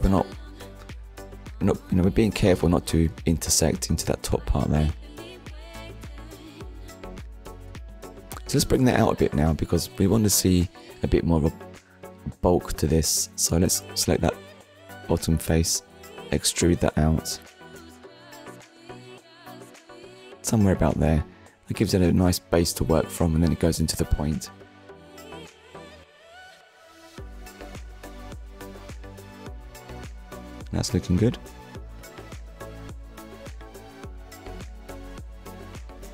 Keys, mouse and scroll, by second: 3.2 click, 9.7 Tab, 10.9 click, 19.2 click, 20.0 Tab, 21.4 click, 22.5 middle click, 26.5 scroll down 1, 27.0 middle click, 29.0 middle click, 33.4 click, 33.8 shift+middle click, 35.9 click.